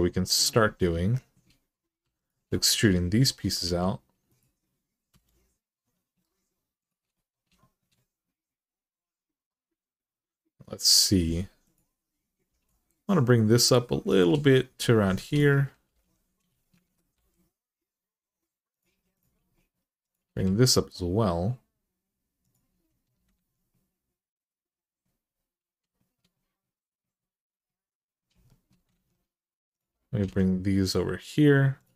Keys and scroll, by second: 1.8 2, 3.4 r, 4.9 e, 12.3 g, 14.8-15.7 typing, 16.6 ctrl+z, 16.9 g, 20.1 g, 23.1 alt+z, 28.7 alt+z, 30.0 g.